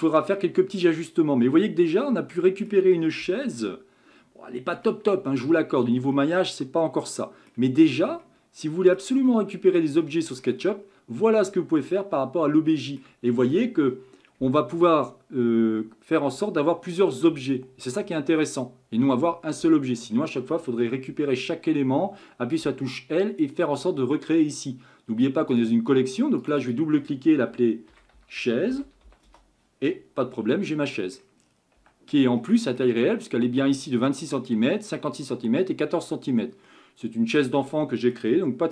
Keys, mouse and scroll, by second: 0.6-3.2 middle drag, 3.2 Tab, 3.5-4.8 scroll up 4, 4.8 scroll up 1, 4.8-5.8 shift+middle drag, 5.8-6.1 scroll down 3, 6.1-7.8 middle drag, 7.8-8.2 scroll down 1, 8.2-10.0 middle drag, 10.0 scroll up 1, 10.0-10.7 shift+middle drag, 10.7-11.4 scroll up 4, 11.4-15.3 shift+middle drag, 21.1 Tab, 22.6 l, 25.5 click, 26.4 click, 26.6-29.6 drag, 30.8 middle click, 31.4 scroll down 4, 31.8 Tab, 32.4-35.4 shift+middle drag, 36.7-38.7 middle drag.